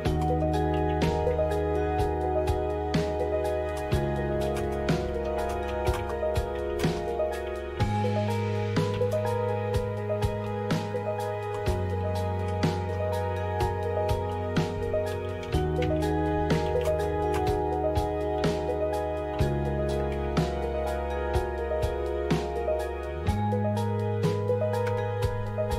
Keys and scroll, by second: 0.2-2.3 typing, 3.4-9.1 typing, 10.4 typing, 11.6-12.8 typing, 13.9-20.6 typing, 24.8 Return.